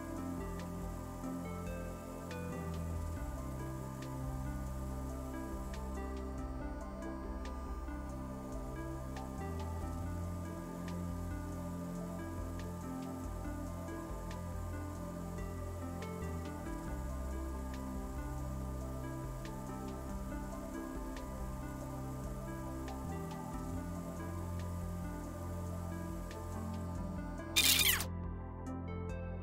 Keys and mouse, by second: 1.6 ctrl+l, 3.1 click, 3.4 g, 3.5 x, 3.9 KP_1, 4.1 Return, 4.5 a, 5.0 click, 5.3 click, 5.6 click, 5.8 click, 6.4 shift+e, 6.5 Return, 7.2 alt+g, 7.9 g, 8.1 x, 8.5 KP_1, 8.6 Return, 9.0 a, 9.6 middle click, 10.1 click, 10.7 click, 10.7 click, 11.3 shift+f, 11.4 Return, 12.3 alt+g, 12.9 click, 12.9 g, 13.4 x, 14.0 KP_1, 14.1 Return, 16.2 ctrl+l, 17.0 super+g, 17.1 x, 17.6 KP_1, 17.7 Return, 18.3 a, 19.0 click, 19.3 click, 19.8 click, 20.4 shift+g, 20.5 Return, 21.3 alt+g, 22.1 x, 22.3 KP_1, 22.5 Return, 22.8 a, 23.3 click, 24.0 click, 24.1 click, 24.3 click, 24.8 shift+h, 24.9 Return, 25.5 alt+g, 26.2 ctrl+l, 27.9 middle click, 28.4-29.4 middle drag.